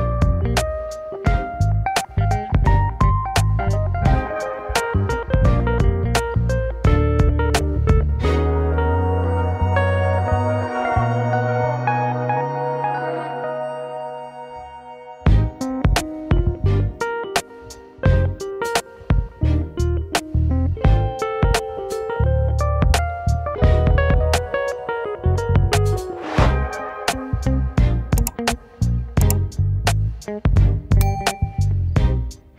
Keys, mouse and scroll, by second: 2.8 ctrl+2, 4.3 Tab, 4.9-5.4 scroll up 3, 5.4-6.5 middle drag, 6.5 scroll up 1, 6.7 shift+middle click, 7.6 shift+click, 8.3 shift+click, 8.6 shift+click, 9.1 shift+click, 9.6 KP_1, 11.0 g, 12.9 scroll down 3, 13.2-15.0 shift+middle drag, 15.0 Tab, 15.6-16.8 middle drag, 17.4 right click, 18.0 KP_1, 18.7 scroll down 1, 20.0 Tab, 20.4 scroll up 2, 21.0 click, 21.7 alt+shift+click, 22.4 scroll up 2, 23.4 ctrl+b, 27.2 click, 27.9 ctrl+KP_Subtract, 29.1 scroll up 2, 30.4-31.4 alt+s, 31.6 scroll down 1, 31.9 scroll up 2, 32.3 shift+middle click.